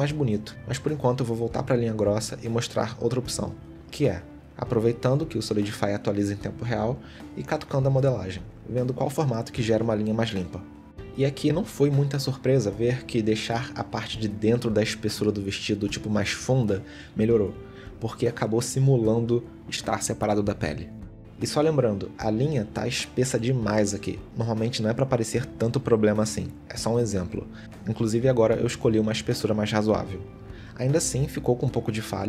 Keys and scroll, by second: 6.9 g, 9.8 g, 11.3 g, 14.6 g, 18.0 g, 22.7 g, 28.1 g, 29.9 g, 31.8 g.